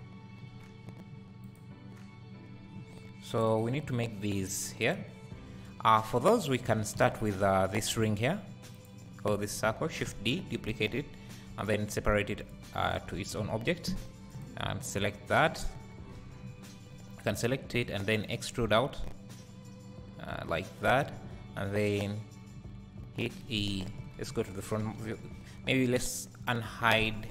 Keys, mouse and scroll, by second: 0.0 `, 1.4 click, 2.5 scroll up 1, 3.8-4.4 scroll down 1, 5.3 scroll up 1, 6.9 `, 8.8 alt+click, 10.2 shift+d, 12.6 p, 12.8 scroll up 1, 13.5 Tab, 14.3 click, 16.2 Tab, 16.9 a, 17.9 e, 24.9 Tab, 26.0 KP_Divide.